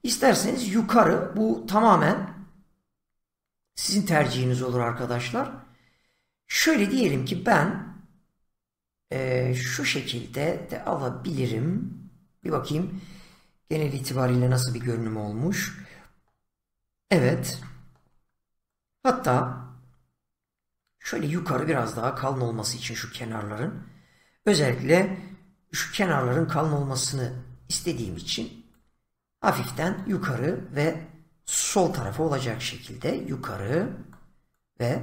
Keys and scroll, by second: 25.7 <, 31.7 <.